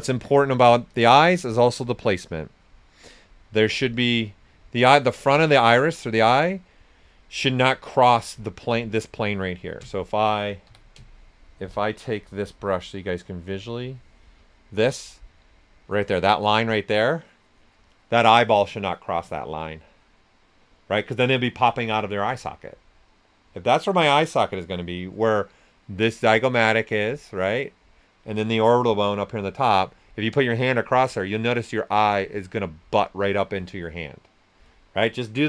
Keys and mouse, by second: 0.9-4.8 alt+drag, 5.3 ctrl+right click, 8.5 ctrl+right click, 8.7 ctrl+right click, 10.6 q, 11.7 ctrl+shift+click, 15.1 space.